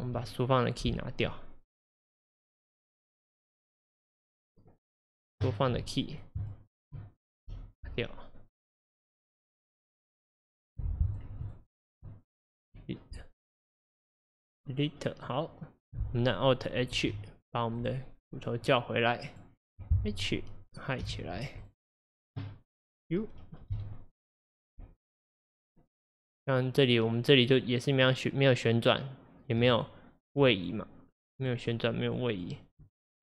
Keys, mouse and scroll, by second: 0.9 Delete, 2.6-3.4 middle drag, 3.4 drag, 3.8 click, 5.2-6.2 drag, 6.5 shift+click, 6.7 shift+click, 7.6 Delete, 8.6 click, 10.2-12.7 drag, 12.7 Delete, 13.8 click, 17.0 alt+h, 17.8 drag, 18.1-18.5 scroll up 4, 18.7-19.3 scroll down 1, 19.3 click, 21.1 h, 21.6 click, 23.8 u, 24.6 middle click, 24.8 u, 25.6-26.1 drag, 28.0-29.0 drag, 29.8 shift+click, 30.6 click, 31.4-32.2 shift+drag, 32.4 shift+click, 32.6 shift+click.